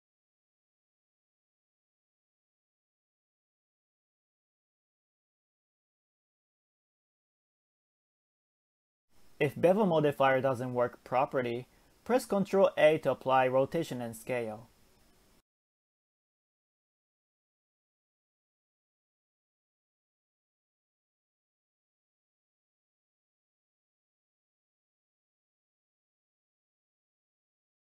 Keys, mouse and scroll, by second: 0.5-2.1 drag, 2.1-2.9 scroll down 1, 2.9-3.2 drag, 3.2-4.1 scroll down 1, 4.1 click, 4.6-5.2 scroll down 1, 5.2 middle click, 5.8-7.9 drag, 7.9 KP_0, 10.1-11.9 drag, 11.9 ctrl+a, 13.9-14.4 scroll up 1, 14.4-15.5 drag, 15.5 KP_0, 17.1-17.6 scroll down 1, 17.6 Tab, 18.3 KP_3, 19.1-20.4 scroll up 1, 20.4 ctrl+r, 21.9 s, 23.4 shift+middle click, 25.7 click, 26.2 s.